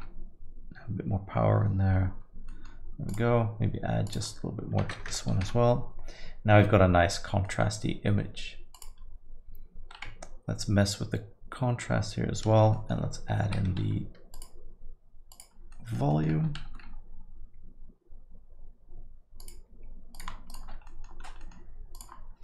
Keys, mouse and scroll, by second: 2.5 middle click, 3.1 click, 4.1 click, 5.1 KP_0, 7.4 middle click, 7.8 scroll down 1, 8.7 click, 10.4 ctrl+scroll down 1, 11.3-11.7 ctrl+scroll up 1, 11.9-12.3 ctrl+scroll down 1, 12.3 ctrl+scroll up 1, 12.8 middle click, 13.5 shift+F3, 15.0 click, 15.7 middle click, 16.1 middle click, 16.6 shift+a, 20.5 ctrl+shift+click, 20.9 middle click, 21.2 scroll up 1, 21.4 middle click, 21.9 click.